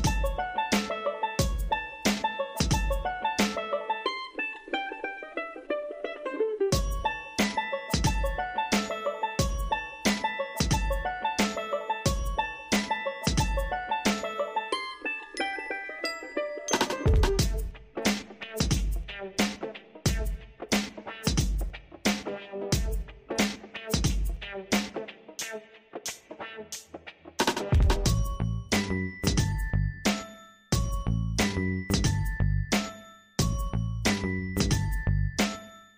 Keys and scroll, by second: 14.2 ctrl+t.